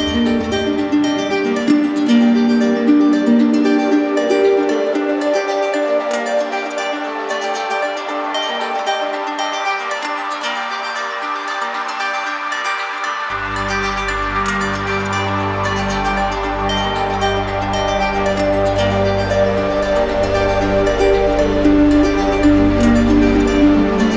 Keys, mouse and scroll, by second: 0.6-1.6 drag, 2.5 ctrl+click, 2.9 ctrl+click, 3.4 w, 9.1 click, 10.5 click, 11.6 alt+click, 14.4 q, 16.5 click, 18.2 click, 18.5 ctrl+click, 19.2 ctrl+click, 19.7 ctrl+click, 20.1 w, 22.6 alt+click.